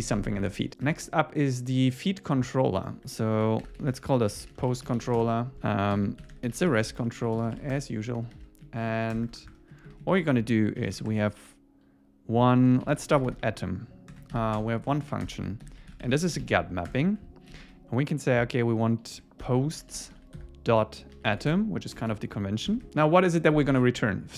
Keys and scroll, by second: 0.9 super+1, 5.2 Return, 5.9 alt+l, 7.7 Return, 8.2 super+1, 8.7 Down, 8.9 super+Right, 9.2 Return, 9.7 Up, 10.2 Down, 14.3 alt+8, 14.6 Return, 14.9 Up, 15.3 Return, 15.6 alt+l, 16.9 Return, 21.5 Escape, 22.7 Escape, 23.7 super+1.